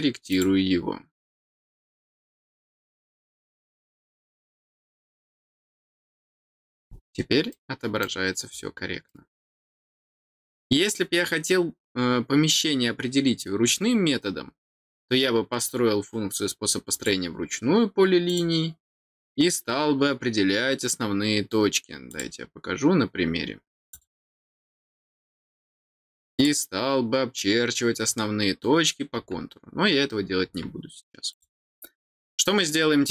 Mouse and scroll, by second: 0.3 click, 3.3 click, 4.7 click, 5.8 click, 6.7 scroll down 2, 7.5 middle click, 9.0 middle click, 16.9 click, 18.2 click, 22.1 click, 23.9 click, 26.3 click, 31.3 click.